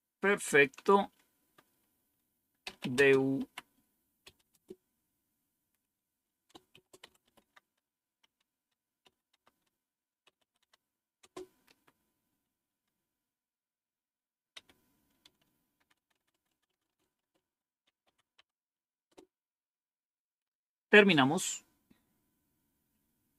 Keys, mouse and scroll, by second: 2.4-11.1 typing, 12.5-13.2 typing, 14.4 Up, 15.7-18.5 typing, 19.0 Return.